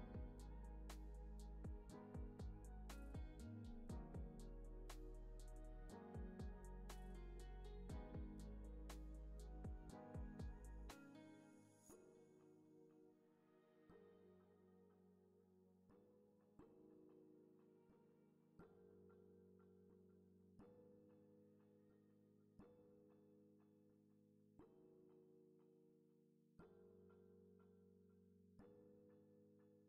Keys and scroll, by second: 1.4 alt+z, 3.3 alt+z, 8.5 alt+x, 10.2 alt+z, 11.1 alt+x, 13.3 3, 13.5 0, 14.3 Return, 15.6 alt+x, 17.1 1, 17.4 0, 17.6 Return, 19.7 alt+z, 20.8 alt+x, 21.5 alt+x, 23.2 alt+z, 24.5 alt+z, 26.3 alt+x, 26.9 alt+x.